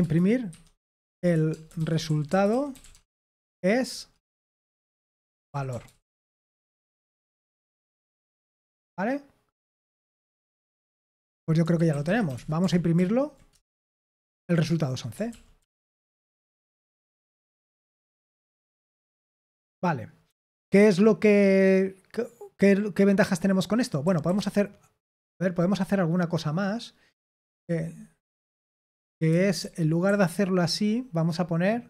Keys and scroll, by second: 0.0-8.2 typing, 11.6-12.8 typing, 12.9 ctrl+p, 13.5 Return, 15.2 ctrl+p, 15.5 ctrl+p, 16.1 Return, 17.6-18.9 typing, 24.0-24.4 typing, 27.5 typing, 29.2-30.7 typing.